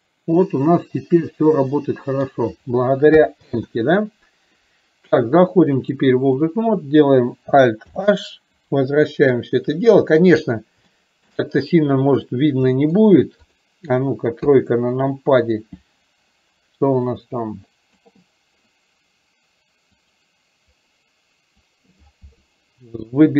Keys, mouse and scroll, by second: 3.7 ctrl+z, 6.1 click, 8.1 alt+h, 9.7-10.3 middle drag, 10.9 shift+middle click, 12.8 middle click, 13.4 click, 17.3-18.2 drag, 19.9 click, 20.8-23.3 drag.